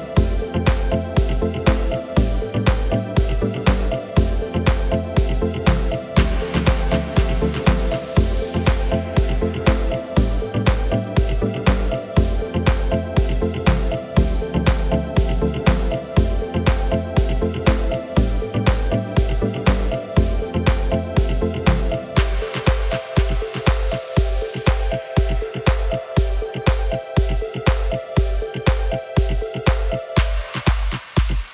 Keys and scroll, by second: 0.5 Return, 6.8 Return, 15.4 Return, 22.6 Return.